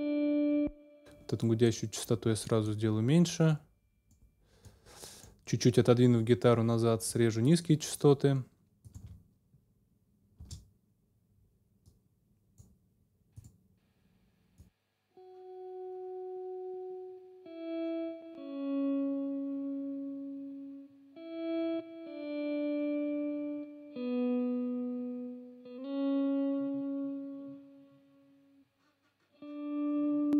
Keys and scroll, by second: 0.3 space, 8.9 space, 10.4 space.